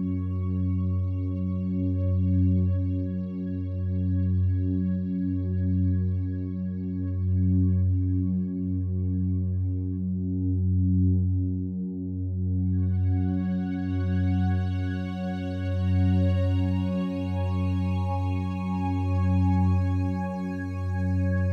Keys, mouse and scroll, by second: 1.7 x, 3.2-10.6 drag, 10.6 1, 12.3 g, 12.7 x, 14.1 click, 14.1 typing, 15.3 typing, 16.7 click, 18.1 click, 20.1 click.